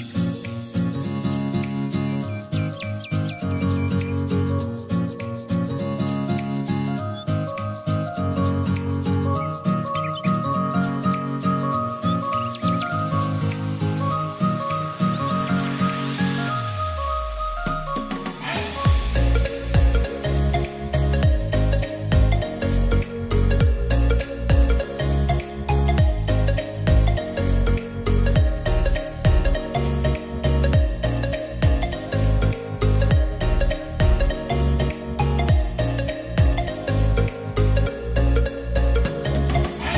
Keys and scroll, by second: 1.0-2.4 typing, 3.8-4.5 typing, 7.2-8.1 typing, 9.2-11.7 typing, 21.0-22.0 typing, 23.3 typing.